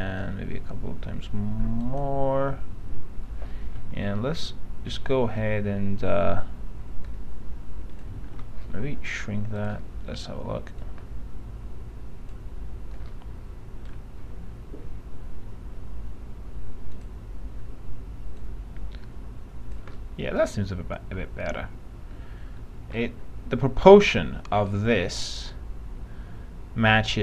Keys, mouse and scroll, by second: 0.1-3.1 drag, 4.0 r, 7.3 click, 8.4 ctrl+z, 9.8-13.1 drag, 13.7 alt+middle click, 17.0 click, 20.3-23.1 alt+middle drag.